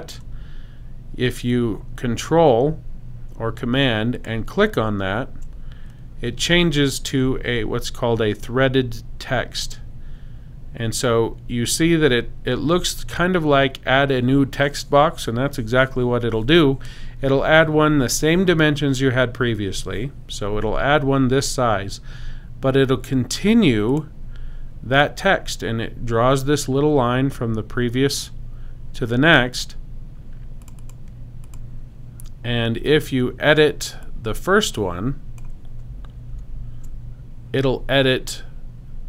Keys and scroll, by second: 36.2 super+x.